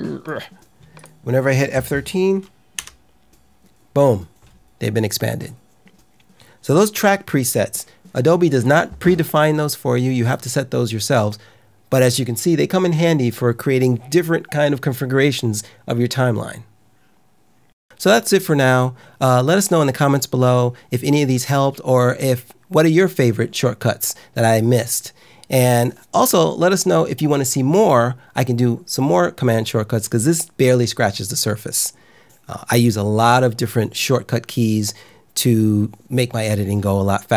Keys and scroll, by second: 2.7 F13, 6.8 `.